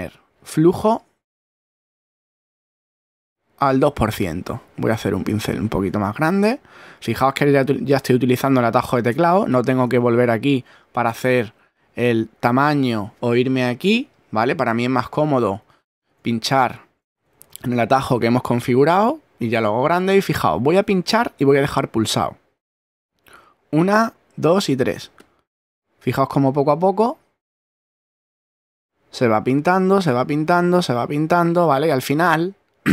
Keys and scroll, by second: 5.3 shift+<, 15.2 <.